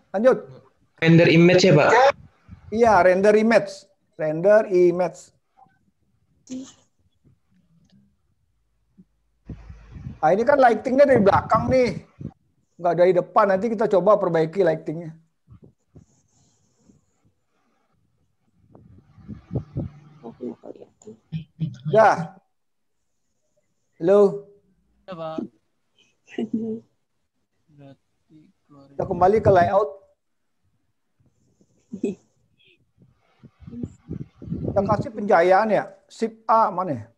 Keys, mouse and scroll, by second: 28.3 click, 31.4 click, 31.4-32.2 scroll down 4.